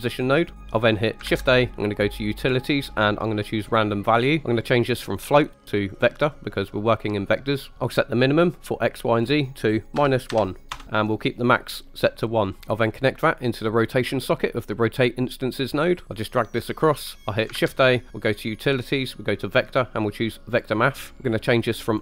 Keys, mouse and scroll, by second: 0.4 middle click, 0.6 click, 0.6 shift+a, 1.3 shift+a, 4.4 click, 5.2-6.8 drag, 8.7-10.7 drag, 12.9-14.7 drag, 16.0 right click, 16.2 click, 17.2 shift+a, 17.6 shift+a, 21.1 click, 21.9 click.